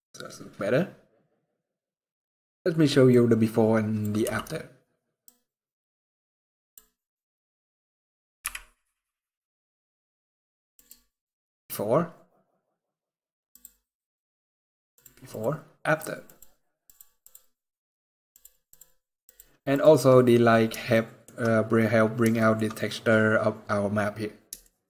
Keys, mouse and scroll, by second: 0.1-0.7 scroll up 1, 2.8 click, 4.0 t, 4.9 click, 7.1-8.0 scroll down 13, 8.1 KP_Decimal, 10.5 click, 13.2 click, 14.7 click, 15.1 click, 16.0 click, 16.5 click, 17.0 click, 18.0 click, 18.5 click, 19.0 click, 19.5 click, 20.6 shift+middle click, 21.2 scroll up 2, 22.1 shift+middle click, 22.4 scroll up 3, 23.2 scroll down 4, 24.1 scroll down 1, 24.3 shift+middle click.